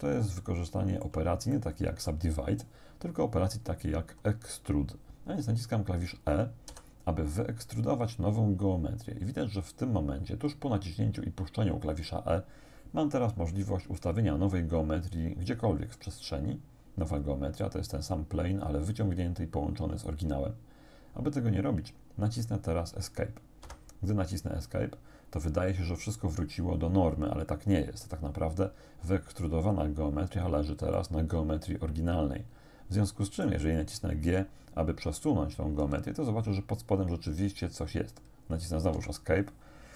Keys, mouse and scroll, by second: 0.9 shift+right click, 1.6 shift+click, 6.7 e, 23.6 Escape, 31.0-33.7 drag, 35.8 g, 39.0 Escape.